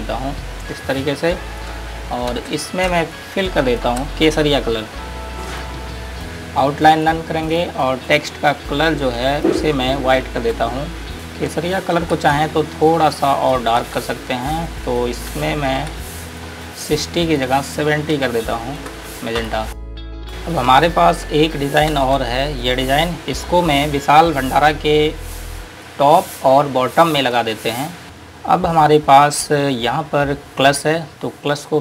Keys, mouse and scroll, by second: 2.7 ctrl+space, 5.8 click, 7.8 click, 10.4 shift+Page_Up, 11.1 typing, 13.2 click, 15.1 click, 16.6 click, 18.4 KP_7, 19.6 KP_Enter, 20.3 click, 22.2 space, 22.9 click, 24.2 scroll up 1, 26.1 click, 28.0-29.7 scroll down 1, 29.7-31.8 scroll up 1.